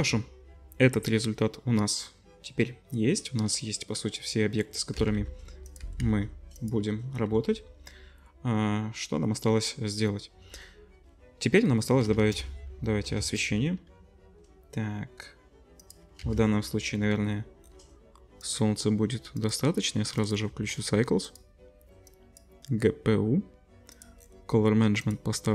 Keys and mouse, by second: 4.9 g, 5.8 g, 7.3 ctrl+s, 12.1 shift+a, 13.4 shift+a, 16.2 z, 17.6-19.3 drag.